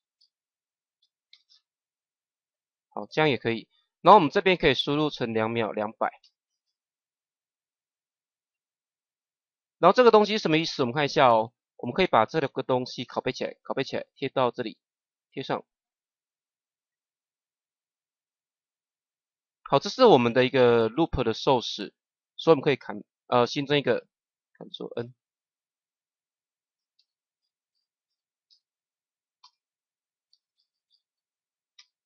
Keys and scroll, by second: 6.1 KP_2, 13.6 ctrl+c, 15.3 ctrl+v, 24.9 ctrl+n, 26.5-28.0 typing, 29.3 shift+-, 30.2 l, 31.7 shift+-.